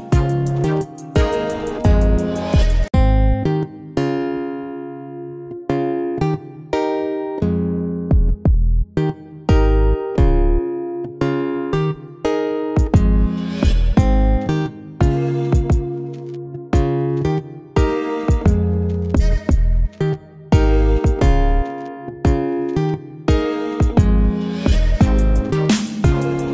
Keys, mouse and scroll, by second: 2.2 shift+Num_Lock, 2.7-4.9 alt+drag, 5.2 alt+click, 5.2-9.3 alt+drag, 12.1 click, 12.2 shift+click, 13.3 shift+click, 15.0 ctrl+g, 19.3 right click, 21.0 click.